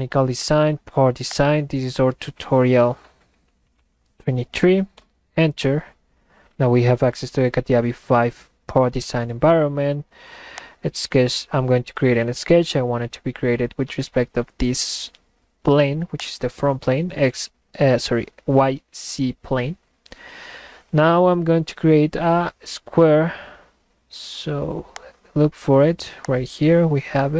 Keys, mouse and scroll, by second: 1.3 click, 10.6 click, 16.2 click, 20.9 middle click, 24.9 click, 26.3 click.